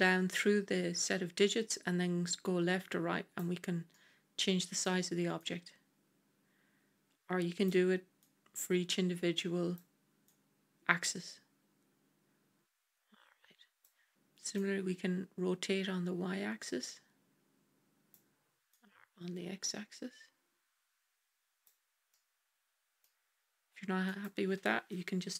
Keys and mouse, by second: 3.8-4.7 middle drag, 5.3-7.6 drag, 8.2-9.7 drag, 10.2-13.7 drag, 14.4-18.1 drag, 18.7-21.5 drag, 22.0 middle click, 23.9-25.3 drag.